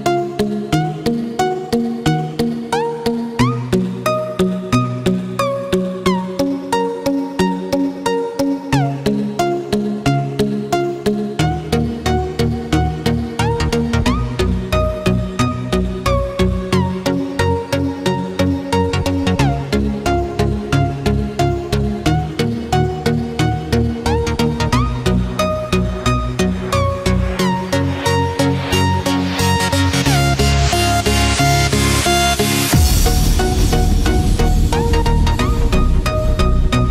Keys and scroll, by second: 6.3 ctrl+-, 7.8 ctrl+0, 8.1 ctrl+=, 11.6 ctrl+-, 11.9 ctrl+0, 13.4 ctrl+z, 19.5 ctrl+=, 27.1 ctrl+-, 27.8 ctrl+=.